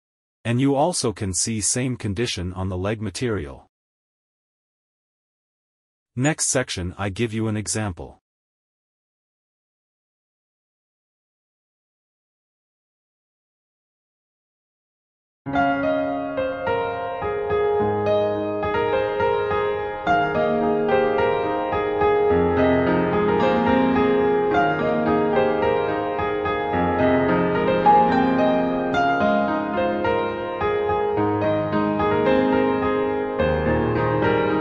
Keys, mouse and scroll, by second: 7.4 scroll down 1, 8.1 middle click, 10.0 click, 10.3 click, 11.4 click, 16.5 click, 17.3 click, 17.7-18.0 scroll down 2, 18.9 scroll down 8, 24.0 click, 27.1 click, 29.6-31.2 scroll down 4.